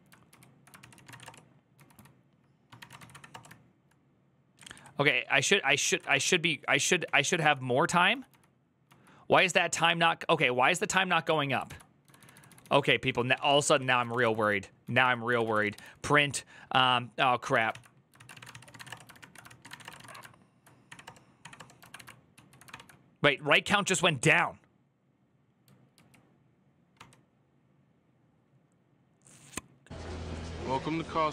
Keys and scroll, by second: 0.0-3.3 typing, 0.1 ctrl+u, 0.6 ctrl+c, 4.3 Down, 4.5 Down, 5.4-6.8 typing, 7.1 ctrl+c, 7.9-8.6 typing, 11.5 alt+{, 11.6-16.0 typing, 17.3 Tab, 17.5 ctrl+c, 17.9-19.9 typing, 19.2 ctrl+c, 19.7 ctrl+a, 20.7 Up, 20.8 Return, 21.2 Up, 21.3 Return, 21.6 ctrl+a, 21.7 [, 22.1 ctrl+u, 22.5 ctrl+d, 25.7 ctrl+u, 26.7 ctrl+d.